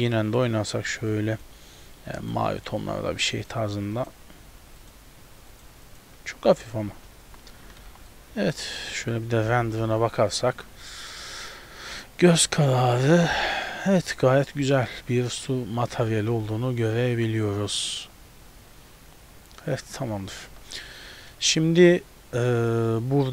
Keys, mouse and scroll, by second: 0.0 click, 1.0 click, 7.0 scroll down 3, 7.3 z, 7.8 ctrl+b, 9.5 F12.